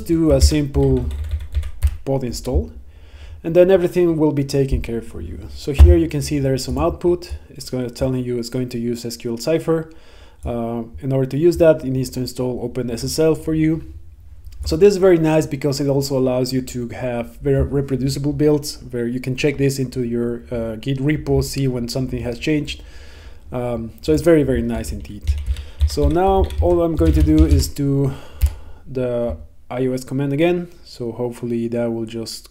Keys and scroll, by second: 0.5 Right, 1.9 Return, 28.5 Return.